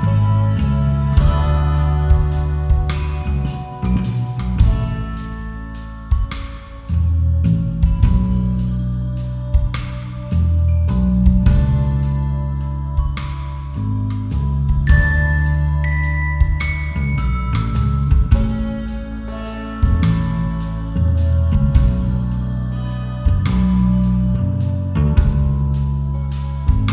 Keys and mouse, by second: 1.1 alt+click, 1.6 f, 5.2 alt+click, 5.7 f, 17.5 KP_Decimal, 20.1 KP_Divide, 23.7 alt+shift+click, 25.0 alt+shift+click, 25.6 alt+shift+click, 26.5 alt+shift+click.